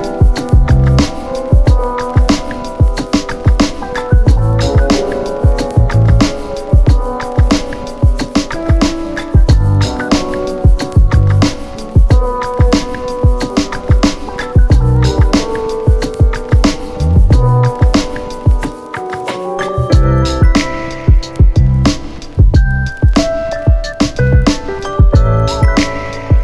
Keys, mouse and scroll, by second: 3.3 click, 7.2 click, 9.2 click, 10.3 click, 12.4 shift+4, 14.4 click, 16.7 click, 20.8 click, 26.1 scroll up 1.